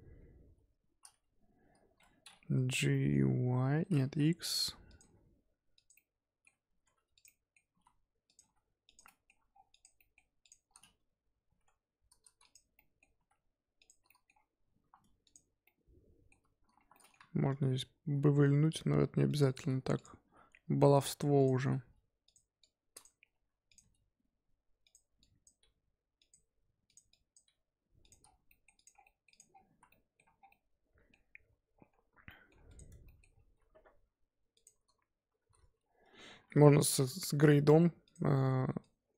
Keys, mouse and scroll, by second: 0.5 Tab, 0.7 Tab, 2.0 Tab, 2.7 scroll up 1, 2.9 middle drag, 3.1 scroll down 1, 3.2 g, 5.0 g, 5.9-6.6 middle drag, 6.6 g, 7.2-7.6 middle drag, 7.6 g, 8.4 g, 9.0-9.5 middle drag, 9.5 scroll down 3, 9.7 click, 9.9 middle drag, 10.1 scroll down 1, 10.4 click, 10.7-11.4 scroll up 1, 11.4 g, 12.7 scroll up 1, 12.7-13.1 middle drag, 13.1 g, 14.0 middle drag, 14.3 scroll up 2, 14.6 Tab, 14.9 2, 15.2 click, 15.6-16.7 middle drag, 16.7 1, 16.9 middle click, 17.4 ctrl+b, 19.9 click, 20.2 g, 21.3 click, 21.7 g, 22.6 click, 23.2 s, 23.8 g, 25.2 click, 25.6 g, 26.4 g, 27.1 click, 27.4 g, 28.2 scroll down 5, 28.3 Tab, 28.4 middle drag, 28.7 click, 28.9 scroll down 2, 29.0 middle drag, 29.3 click, 29.5 scroll down 1, 29.6 z, 29.9-30.3 middle drag, 30.3 scroll down 1, 30.5-31.3 middle drag, 31.3-32.2 scroll up 9, 32.2-32.6 middle drag, 32.6 click, 32.9 Tab, 33.0 middle click, 33.3 scroll down 1, 33.3-33.7 scroll up 3, 33.7 2, 33.9-34.5 scroll up 4, 34.5 click, 35.4 shift+a, 35.7-36.1 scroll down 3, 36.1 a, 36.8 s, 38.3 z, 38.8 click.